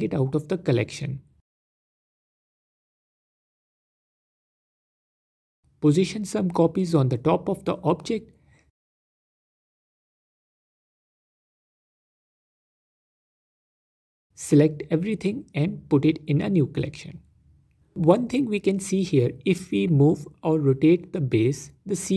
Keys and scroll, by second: 0.3 shift+d, 8.6 s, 9.7 alt+d, 10.4 alt+d, 11.0 alt+d, 11.7 alt+d, 12.7 s, 13.7 ctrl+z, 16.0 m, 17.6 Return.